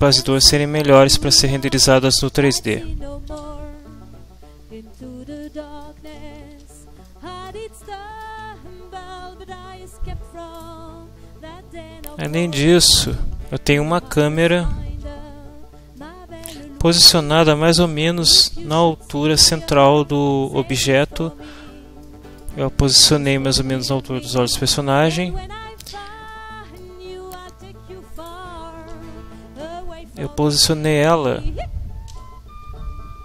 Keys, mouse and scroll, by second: 3.3 ctrl+Down, 4.9 middle click, 5.8 ctrl+middle click, 6.5 ctrl+Tab, 7.0 ctrl+middle click, 7.8 shift+middle click, 10.5 right click, 12.2 click, 14.0 ctrl+middle click, 16.0-17.6 middle drag, 22.0 middle click, 22.8-23.9 ctrl+middle drag, 24.6-26.0 middle drag, 26.3 middle click, 28.2 right click, 28.9 Tab, 30.6 middle click, 32.1 shift+s.